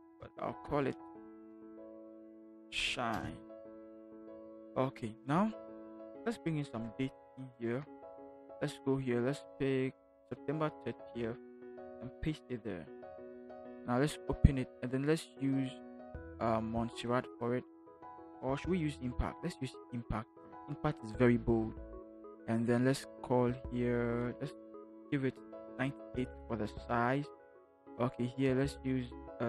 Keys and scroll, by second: 0.5 ctrl+g, 1.5-3.1 typing, 6.4 t, 11.0 ctrl+c, 12.0 ctrl+v, 25.0 9, 26.1 Return.